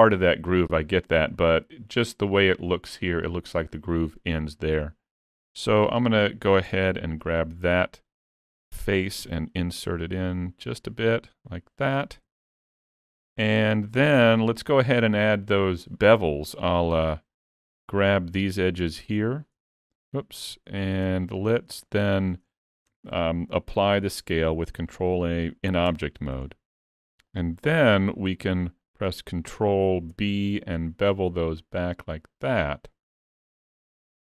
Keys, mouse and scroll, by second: 4.8 middle click, 5.9 3, 6.8 3, 7.2 click, 7.7 middle click, 9.2 e, 12.3 alt+a, 12.8 middle click, 14.6 shift+middle click, 16.5-16.8 scroll up 2, 17.0 2, 18.0 click, 19.1 shift+click, 20.7 ctrl+z, 21.3 shift+click, 21.9 scroll down 2, 22.2 shift+middle click, 23.0 Tab, 23.8 ctrl+a, 25.9 Tab, 26.5-26.8 scroll up 2, 27.3 shift+middle click, 30.2 ctrl+b.